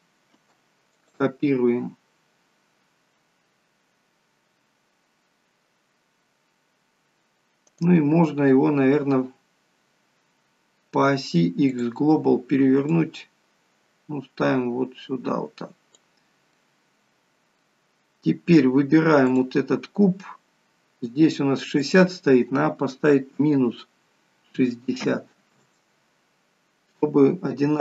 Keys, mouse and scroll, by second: 0.3 shift+d, 8.5 right click, 13.1 click, 16.5 middle click, 17.9-18.2 scroll up 3, 19.3 click, 21.8 click.